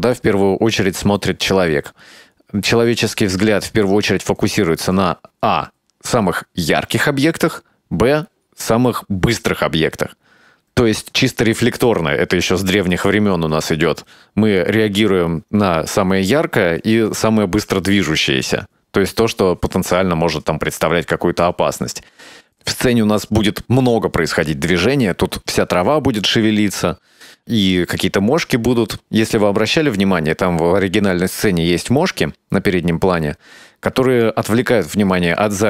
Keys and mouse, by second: 18.6-29.1 drag.